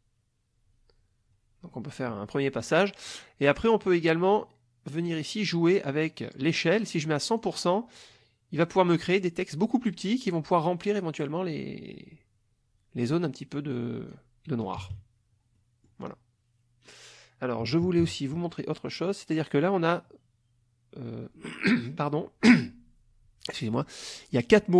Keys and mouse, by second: 6.8 click, 8.1-14.3 drag, 14.7 KP_Subtract, 15.6 click, 17.6 KP_Subtract, 18.7 click.